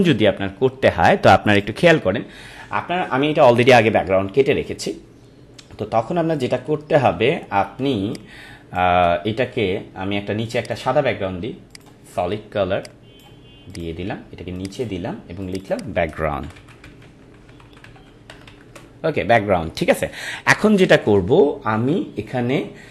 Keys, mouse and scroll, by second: 1.5 click, 6.6 click, 6.8 ctrl+=, 7.8 space, 8.1 click, 8.4 space, 10.6 click, 16.2-18.6 typing, 18.7 Return, 20.6 ctrl+-.